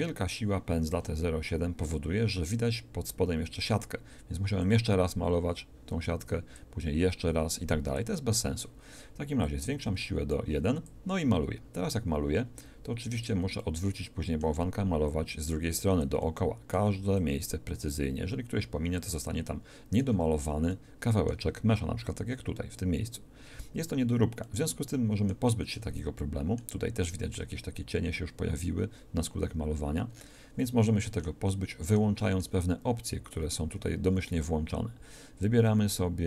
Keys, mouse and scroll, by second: 5.5-6.5 drag, 7.3-8.5 drag, 9.4-12.7 drag, 13.7-15.8 middle drag, 15.8-16.9 drag, 16.3-17.3 middle drag, 17.3 click, 19.5-24.3 middle drag, 24.5 middle click, 24.9-27.2 middle drag, 27.5 middle click.